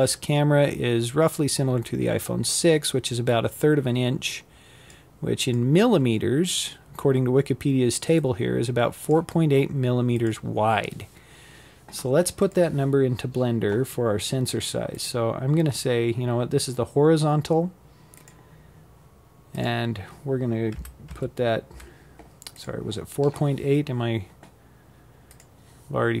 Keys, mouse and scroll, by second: 12.6-15.6 drag, 17.2-20.2 drag.